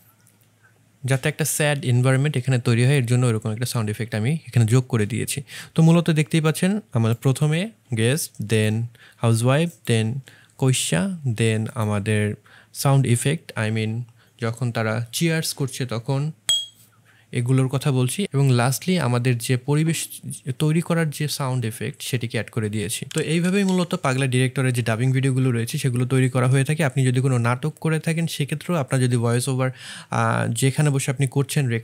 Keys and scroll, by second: 1.1 space.